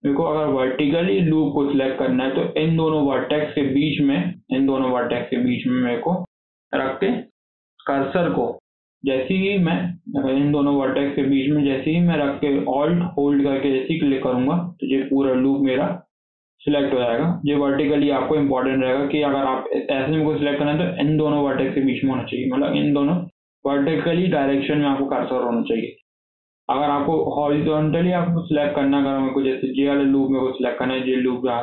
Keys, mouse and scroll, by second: 3.1 click, 3.8 click, 4.2 click, 4.6 click, 5.1 shift+click, 9.4 click, 9.7 click, 13.9 alt+click, 14.3 scroll down 5, 14.6 middle click, 14.9 alt+z, 15.1-17.8 middle drag, 17.8 KP_7, 18.0 alt+z, 18.4-18.7 scroll up 5, 18.7-21.7 shift+middle drag, 25.3 scroll down 3, 25.5 shift+middle click, 25.9 scroll up 2, 26.1-27.5 shift+middle drag, 27.5 scroll down 1, 27.7-28.7 shift+middle drag, 28.7 scroll down 1, 28.9-31.6 shift+middle drag.